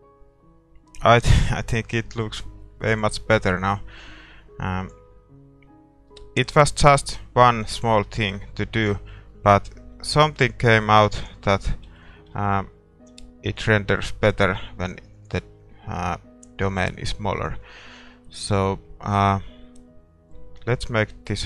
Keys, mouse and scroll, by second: 2.8 middle click, 3.2-10.9 drag, 10.9 shift+z, 11.5 ctrl+s, 11.5-20.9 middle drag, 12.0 z, 13.2 a, 13.7-20.9 right drag, 20.9-21.4 drag.